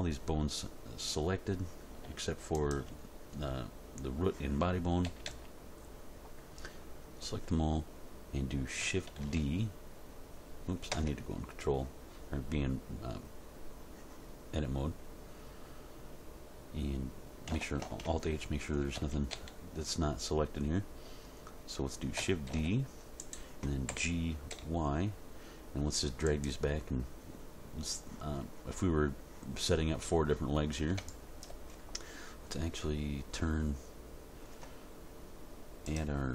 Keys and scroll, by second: 5.0 a, 9.2 shift+d, 10.9 Tab, 17.8 alt+h, 19.0 a, 22.5 shift+d, 23.9 g, 24.5 y.